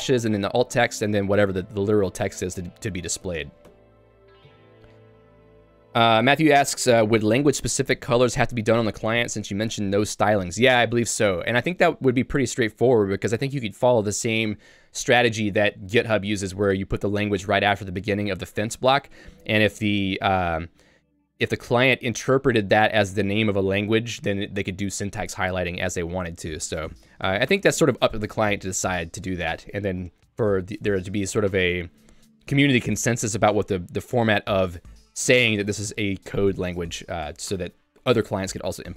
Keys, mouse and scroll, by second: 0.0-0.7 typing, 4.9 k, 5.2 j, 13.9 k, 17.0-19.6 typing, 26.3 j, 34.9 k, 37.3 l, 37.7 h.